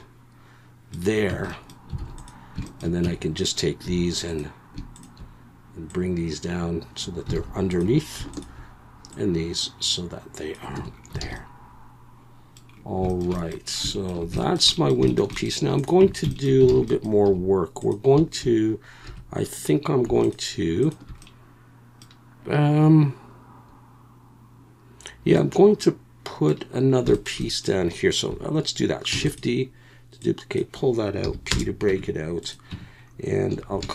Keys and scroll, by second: 1.3 Tab, 2.0 alt+a, 3.0 Tab, 3.8 2, 7.3 alt+a, 10.8 Tab, 11.2 alt+a, 16.0 Tab, 16.7 alt+a, 17.2 2, 19.0 2, 29.1 shift+d, 31.2 p, 31.9 Tab, 32.7 Tab, 33.5 a.